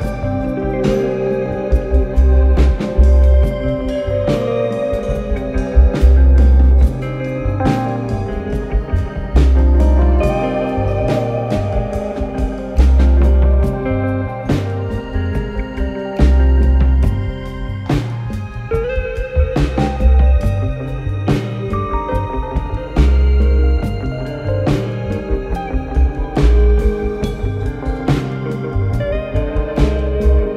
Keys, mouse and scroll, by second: 1.4 click, 2.4 click, 2.8 s, 4.2 click, 5.6 click, 5.9 click, 6.5-8.4 typing, 10.0 right click, 10.8-11.5 typing, 11.2 click, 12.6 click, 12.7-13.5 typing, 14.8 click, 16.7 click, 21.7 click, 22.7 click, 23.3-23.8 typing, 24.9 click.